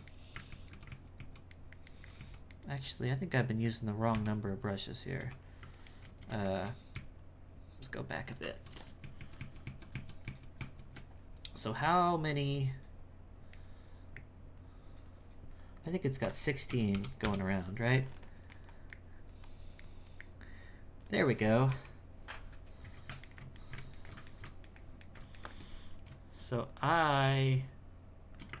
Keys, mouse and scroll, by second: 0.1 middle click, 0.5 ctrl+z, 0.7 ctrl+z, 1.6 ctrl+middle click, 2.2 z, 2.6-4.1 middle drag, 4.1 KP_1, 5.2 KP_1, 5.9-6.9 ctrl+middle drag, 6.9-8.6 ctrl+z, 8.8 ctrl+shift+z, 9.0 ctrl+shift+z, 9.6 ctrl+shift+z, 9.9 ctrl+shift+z, 10.3 ctrl+shift+z, 11.8 Tab, 13.6-16.3 middle drag, 16.3-18.6 drag, 18.6-21.7 middle drag, 21.7 KP_1, 23.3-27.3 ctrl+shift+middle drag, 27.3-28.6 shift+drag.